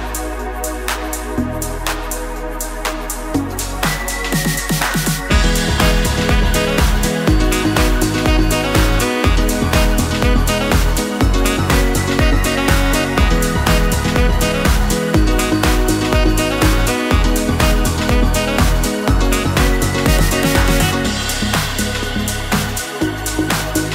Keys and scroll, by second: 2.4 Return.